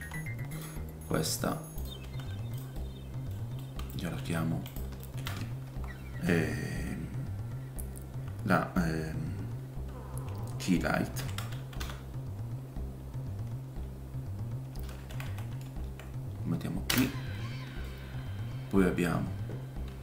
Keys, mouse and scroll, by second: 0.0 g, 0.9 r, 3.0-8.3 middle drag, 5.3-5.6 scroll up 1, 5.6 F2, 8.3-20.0 drag, 15.2 Left, 15.8 Right, 17.9 middle click, 19.9 shift+d.